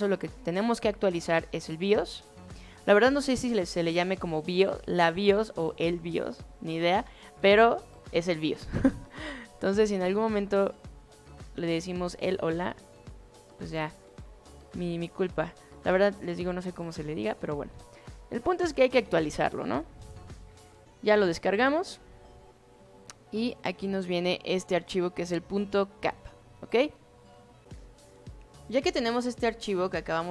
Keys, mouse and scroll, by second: 10.3 click, 13.8-14.3 drag, 15.2 click, 18.8 click, 21.9 click, 23.7-24.2 drag.